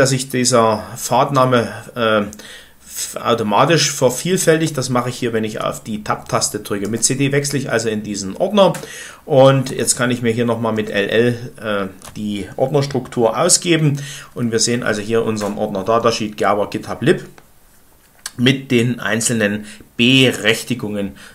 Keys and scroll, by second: 6.8 Return, 9.3-10.1 typing, 10.7 Return.